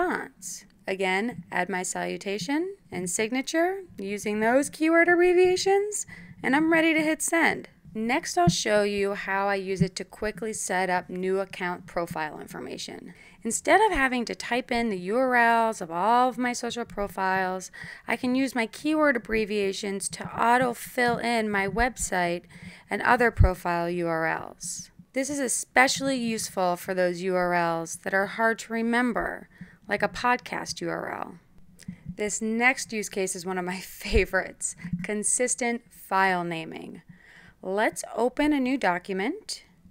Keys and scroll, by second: 0.0-1.8 typing, 0.0 Return, 8.0 Tab, 11.8-13.8 typing, 15.8 j, 16.0 r, 18.9-20.8 typing, 23.4-25.5 typing.